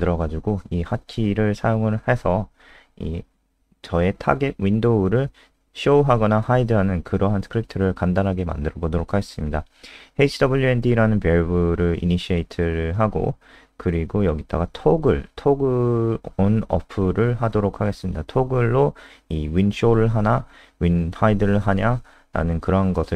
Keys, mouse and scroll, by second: 0.0-0.2 typing, 1.3-4.4 typing, 6.3 Escape, 6.8 ctrl+Home, 8.6-11.5 typing, 13.3-17.8 typing, 17.8 Down, 17.9 Down, 20.1 Up, 20.3 Left, 20.6 ctrl+shift+Home, 22.3 Down, 22.4 Down.